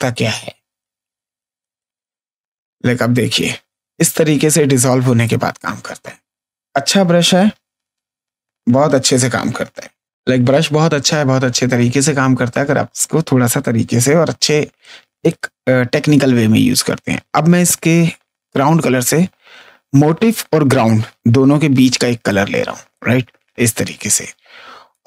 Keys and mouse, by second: 2.2 click, 3.3 ctrl+space, 3.5 click, 4.9 click, 5.9 ctrl+z, 15.2 click, 22.0 click, 24.5 space, 24.8 click.